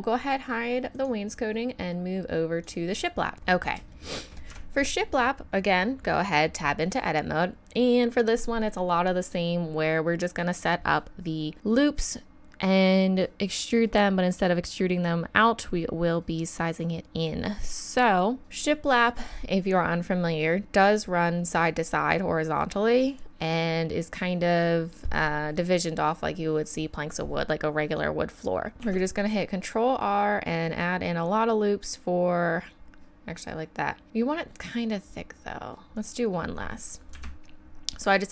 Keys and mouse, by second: 0.9-3.3 drag, 3.3 KP_1, 4.5 Tab, 28.8 ctrl+r.